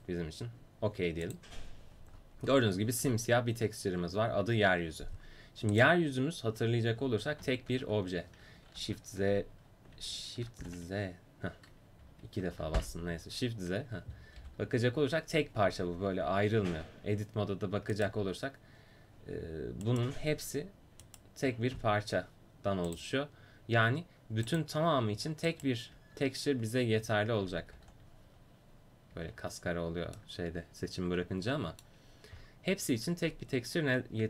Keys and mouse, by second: 5.8-6.8 right drag, 7.9 shift+s, 11.0 shift+z, 11.5 shift+z, 13.4 shift+z, 14.4 g, 17.3 Tab, 18.0-27.8 drag, 26.1 Tab, 27.2 Tab, 27.8 a, 29.3 Tab, 32.4 click, 33.3-34.2 drag.